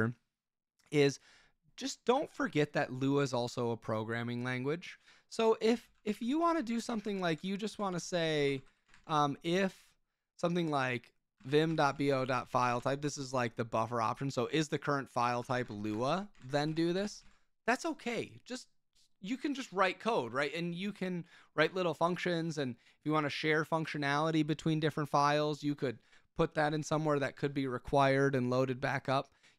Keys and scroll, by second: 5.6-9.5 typing, 11.1-13.5 typing, 15.0-17.9 typing.